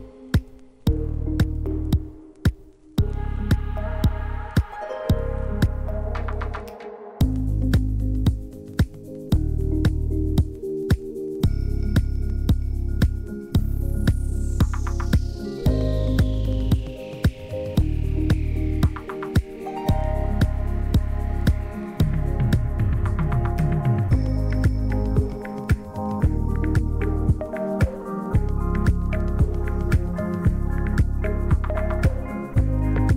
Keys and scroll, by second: 1.5 \, 3.6 Delete, 4.8-6.6 typing, 13.2-14.5 typing, 17.9 \, 19.4 t, 21.2-23.0 typing, 26.2 \, 27.9 p.